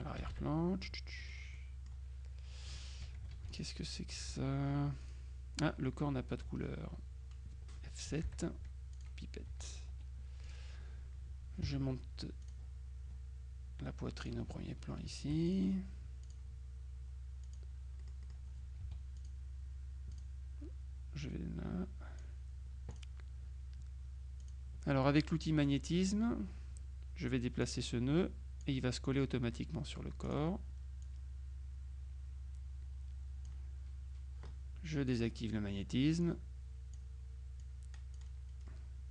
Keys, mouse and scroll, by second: 0.2 KP_Subtract, 1.3 click, 3.4 F2, 3.6 click, 4.4 F1, 5.1 F2, 5.1 click, 8.3 F7, 9.0 click, 9.6 F1, 10.0 F2, 10.5 click, 11.7 F1, 12.5 click, 14.2 click, 15.5 shift+click, 16.3 click, 17.5 click, 18.3 click, 18.9 F2, 19.2 click, 20.2 click, 21.3-22.8 drag, 23.0 click, 24.5 click, 27.7-29.2 drag, 29.6-30.9 middle drag, 30.4 click, 31.1-34.0 drag, 35.2 click, 36.3 click, 37.7 click.